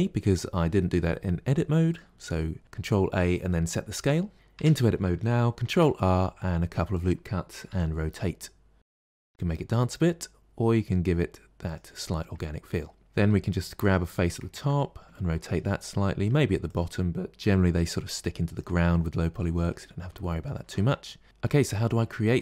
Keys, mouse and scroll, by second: 4.4 Tab, 5.5 ctrl+r, 12.0 middle click, 13.0 click, 13.1 r, 14.4-16.5 ctrl+middle drag, 16.5 click, 17.4 r, 18.8-21.6 middle drag, 21.6 scroll up 2, 22.2-22.4 shift+middle drag.